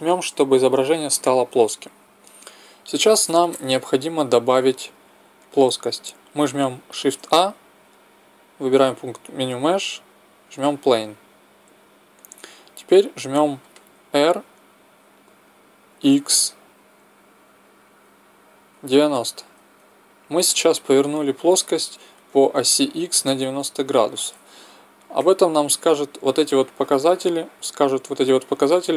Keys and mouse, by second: 7.0 shift+a, 14.2 r, 22.4-25.3 middle drag, 25.3 n.